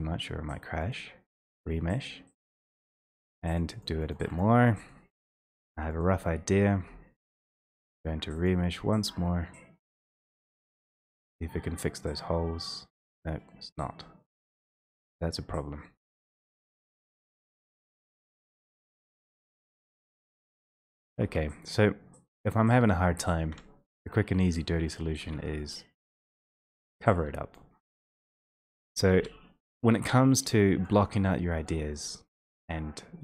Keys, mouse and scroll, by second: 3.6 click, 3.9 click, 4.1 click, 4.4 click, 4.7 click, 5.1 click, 5.2 click, 5.5 click, 5.8 click, 6.1 click, 8.0 click, 8.5 click, 15.9 1, 18.5 click, 19.1 a, 21.0 click, 21.3 1, 22.6 1, 23.5 d, 25.0 click, 25.2 w, 26.6 w, 27.6 click, 28.7 click, 28.7 w, 29.1 e, 30.8 click, 31.8 click, 32.1 alt+middle click.